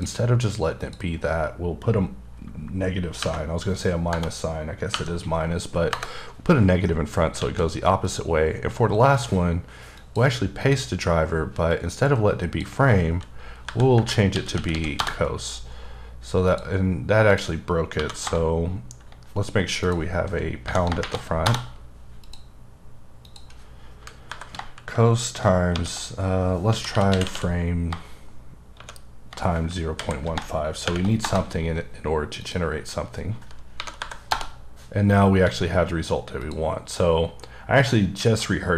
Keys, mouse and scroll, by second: 0.8 click, 5.9 KP_Enter, 7.4 alt+a, 8.0 click, 9.1 right click, 9.9 click, 10.6 click, 11.7 click, 13.6 Delete, 13.9 Delete, 14.3-14.7 typing, 15.0 Return, 16.5 click, 17.3 click, 17.9 Home, 18.3 Return, 19.8 click, 20.6 Home, 21.0 shift+3, 21.5 Return, 22.2 click, 23.2 click, 24.3 Delete, 25.7-27.3 typing, 28.7 shift+8, 30.0 End, 30.8 shift+0, 32.4 click, 34.0 Delete, 34.3 Return, 35.4 a, 36.4 click.